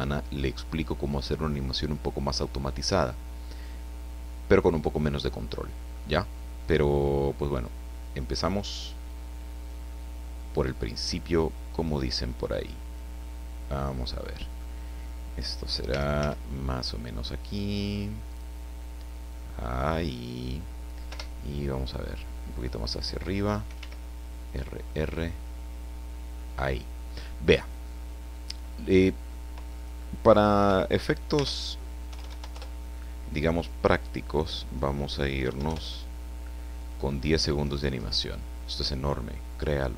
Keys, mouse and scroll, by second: 3.6-5.2 drag, 5.2 middle click, 7.2-8.6 drag, 9.0 click, 11.3 click, 12.1-13.1 drag, 13.8-14.8 middle drag, 15.8 r, 16.2 z, 18.2 click, 19.1-20.6 drag, 21.1 KP_0, 23.7 r, 26.4 click, 29.7 click, 30.5 KP_1, 31.3 Tab, 32.0 KP_2, 32.2 KP_5, 32.2 KP_0, 32.4 KP_Enter, 33.5 click, 34.6 click, 35.4 KP_1, 35.6 KP_Enter, 36.8 click, 38.2-38.6 scroll down 1, 39.9 scroll up 1.